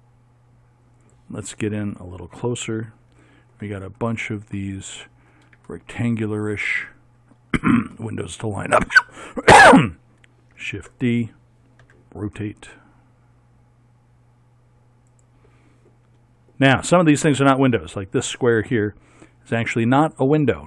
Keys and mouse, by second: 2.9 middle click, 3.4 middle click, 4.7 middle click, 5.8 middle click, 6.2 middle click, 8.1 middle click, 8.4 middle click, 10.7 shift+d, 11.9 r.